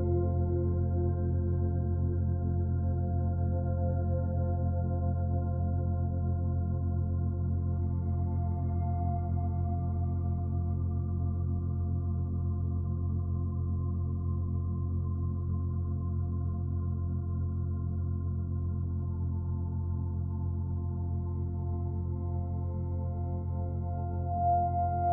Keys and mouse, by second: 0.6 click, 4.2 click, 5.5 click, 5.7 click, 6.8 click, 9.2 click, 12.1 click, 14.3 click, 15.3 click, 18.0 click, 18.6 click, 21.9 click, 23.6 click, 24.2 click, 24.7 click.